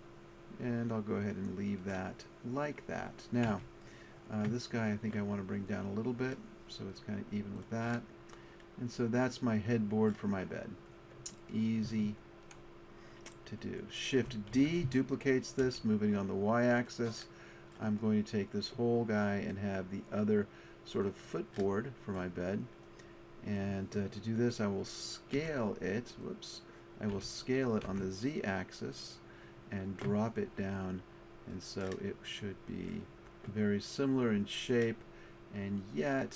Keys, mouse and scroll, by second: 3.5 Tab, 3.8-7.5 drag, 8.0 middle click, 9.4 middle click, 11.4-13.7 drag, 14.5 shift+d, 25.4 w, 27.2 s, 30.6-31.8 drag, 31.8 middle click.